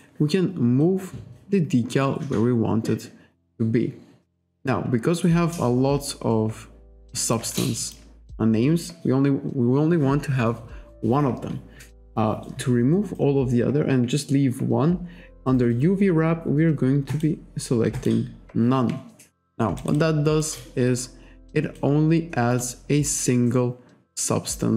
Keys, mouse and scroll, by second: 0.8 click, 7.5 alt+right click, 7.8 alt+click, 17.1 click, 18.0 click, 19.8 alt+right click, 20.0 alt+click, 20.6 alt+click, 22.6 click.